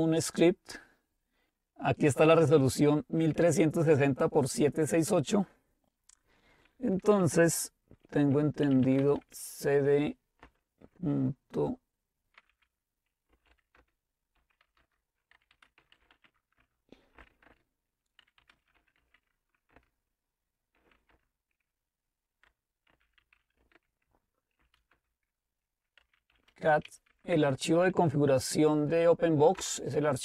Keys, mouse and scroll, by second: 4.6 click, 8.5-9.3 typing, 10.4 typing, 12.6-27.6 typing, 13.8 Return, 29.6 Return.